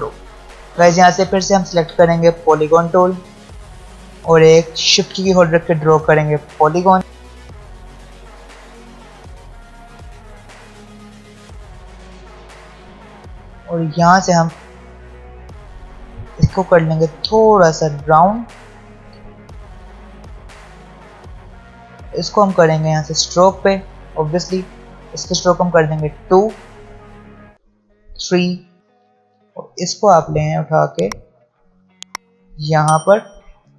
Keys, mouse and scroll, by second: 0.4 v, 3.7 ctrl+alt+scroll down 1, 5.0-9.9 shift+drag, 9.9-11.3 scroll up 1, 11.8 scroll down 1, 12.8 v, 13.6 ctrl+alt+scroll up 1, 21.5 ctrl+alt+scroll down 1, 22.9 click, 25.7-26.4 scroll up 1, 28.1-28.7 scroll up 1, 28.7-33.7 drag.